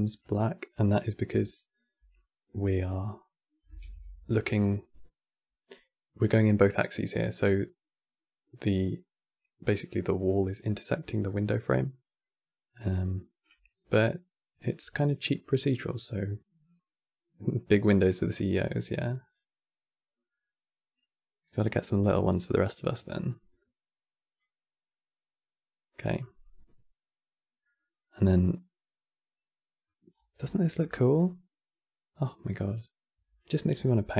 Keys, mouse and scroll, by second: 2.2-3.5 middle drag, 3.5 shift+f, 11.9-14.9 middle drag, 19.0-22.0 drag, 22.7-25.7 drag, 26.3 scroll down 1, 27.6 scroll down 1, 28.0-29.8 middle drag, 29.8-30.2 scroll down 2, 30.2-33.5 shift+middle drag, 33.5 scroll down 5, 33.8 middle click.